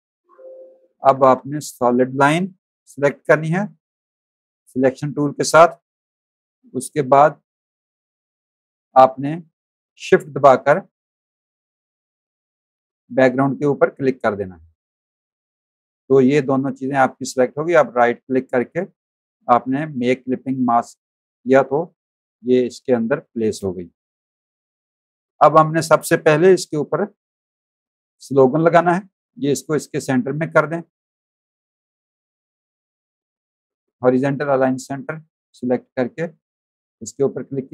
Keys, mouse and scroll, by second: 0.6 click, 1.2 z, 1.3 click, 14.3 shift+click, 18.0 right click, 20.6 click, 21.5 click, 22.0 z, 22.3 alt+click, 22.8 alt+click, 23.2 click, 24.0 v, 24.2 click, 26.7 v, 27.3 click, 28.0 click, 29.3 click, 30.0 shift+click, 31.6 click, 34.5 click, 35.5 click, 36.5 shift+click, 37.5 click.